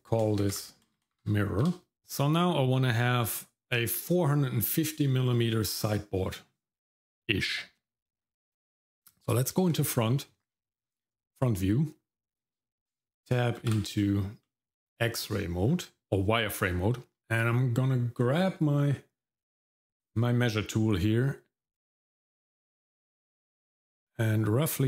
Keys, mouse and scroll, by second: 1.0 r, 1.9 shift+middle click, 1.9-2.7 scroll up 2, 10.8-12.9 scroll up 1, 13.6 shift+z, 14.4 middle click, 15.6-16.0 scroll up 1, 17.2 click, 20.0 click.